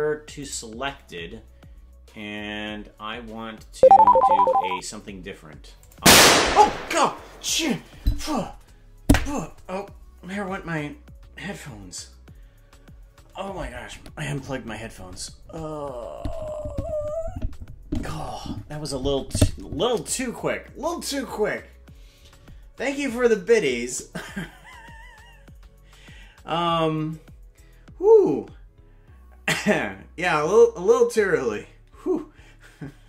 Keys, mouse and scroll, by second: 4.5 Tab, 5.7 click.